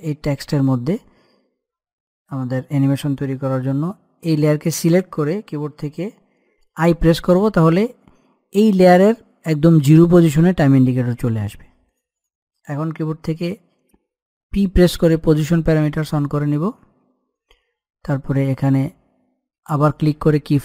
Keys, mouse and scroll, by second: 15.2-15.9 typing, 16.9-18.7 scroll down 1, 19.6 click.